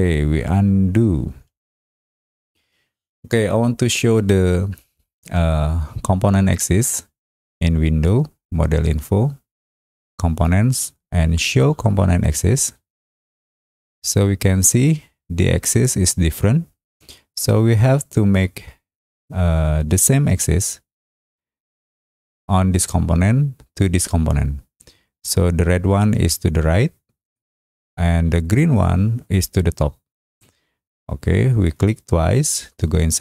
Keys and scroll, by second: 1.5 ctrl+z.